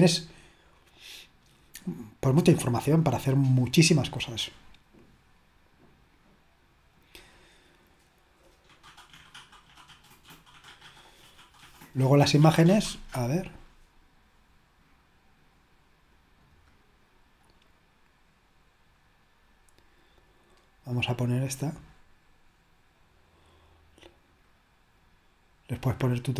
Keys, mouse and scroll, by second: 3.1-3.6 scroll up 2, 7.2 click, 10.8 click, 13.7 click, 16.6 click, 16.8 click, 17.3 click, 17.7 click, 21.1 click, 25.0 click.